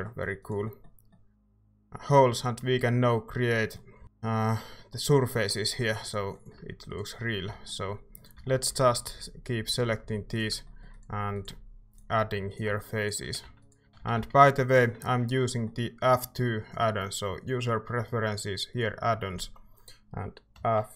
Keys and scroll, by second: 4.0 typing, 7.1-8.9 typing, 10.0-11.5 typing, 13.0-14.8 typing, 16.1 typing, 20.5-20.9 typing.